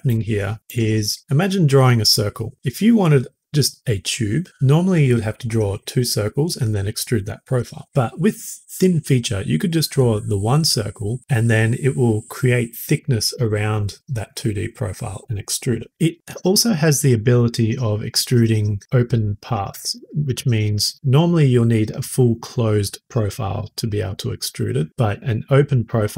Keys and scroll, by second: 0.1 typing.